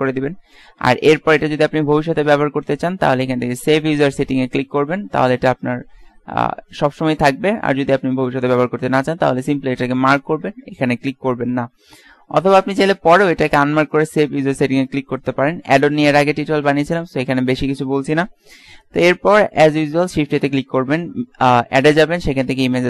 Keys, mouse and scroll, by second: 20.0 shift+a.